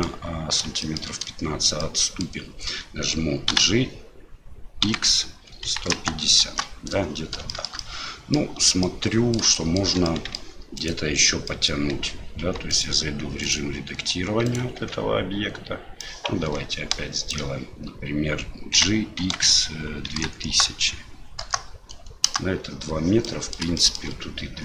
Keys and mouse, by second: 0.9 shift+middle click, 1.9 middle click, 7.6 shift+middle click, 7.9 middle click, 8.9-9.4 middle drag, 9.6 shift+middle drag, 10.2 middle click, 10.8 right click, 11.5 middle click, 11.9 Tab, 12.4 Tab, 12.7 right click, 13.4 right click, 14.4 right click, 16.0-17.3 drag, 18.7 g, 23.3 middle click, 23.8 shift+middle click.